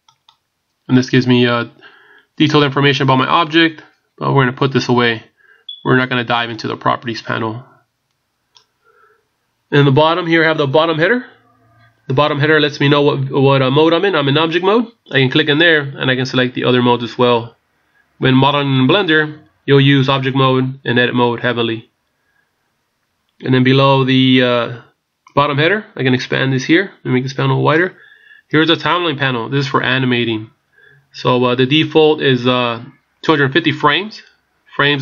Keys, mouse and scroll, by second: 0.1 click, 6.5 click, 15.1 click, 26.2 click.